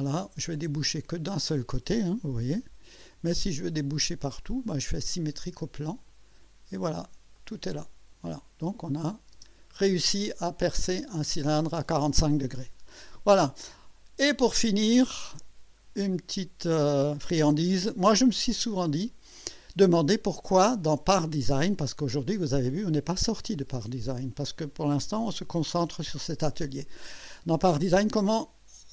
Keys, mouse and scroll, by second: 3.3-4.2 drag, 4.9 click, 6.1 click, 7.3 click, 8.9 click, 9.3 space, 9.9-11.6 drag, 13.6-15.0 drag, 15.3 scroll up 1, 16.1-17.0 right drag, 18.4-20.1 drag, 24.4-27.4 drag.